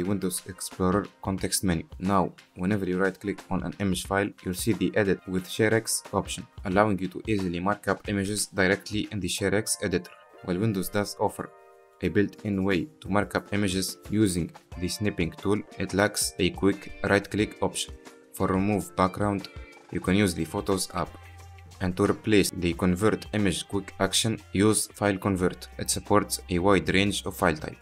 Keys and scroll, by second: 11.2 ctrl+z, 11.5 ctrl+z, 14.2 ctrl+z, 15.2 ctrl+z, 15.6 ctrl+z.